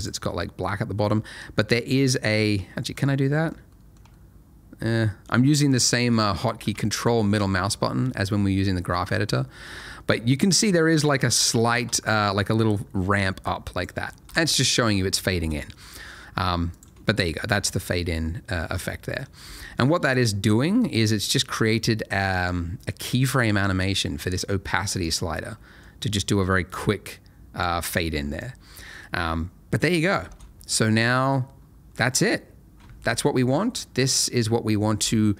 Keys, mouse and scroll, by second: 1.6-1.9 scroll up 1, 1.9-2.4 scroll down 1, 2.4 ctrl+middle click, 3.1 ctrl+middle click, 3.7 middle click, 4.1 ctrl+middle click, 7.2 ctrl+middle click, 10.1 ctrl+middle click, 12.7 click, 14.2 Escape, 15.3 space, 16.7 click, 19.4 space, 20.0 click, 20.5 middle click, 25.0 click, 30.2 space, 31.5-31.9 scroll down 1.